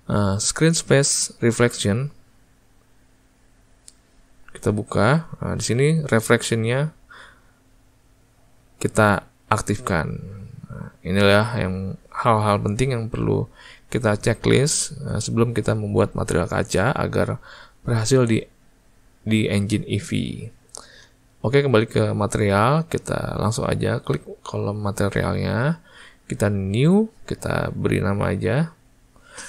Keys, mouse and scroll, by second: 3.7-8.3 drag, 9.0 click, 27.0-28.6 drag, 28.7-29.4 drag.